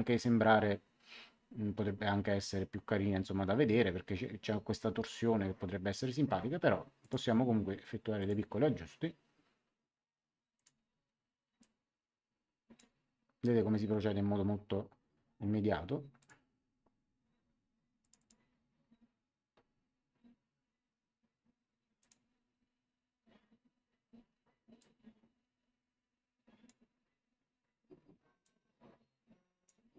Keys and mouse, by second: 7.0 click, 8.1 click, 10.5 click, 11.5 click, 16.1 click, 18.0 click, 21.9 click, 24.7 click, 28.4 click.